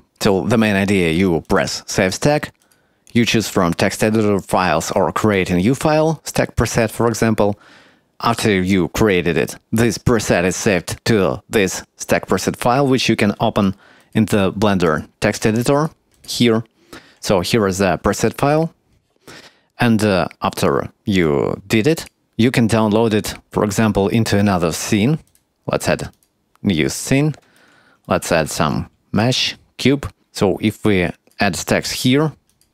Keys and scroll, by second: 28.1 shift+a.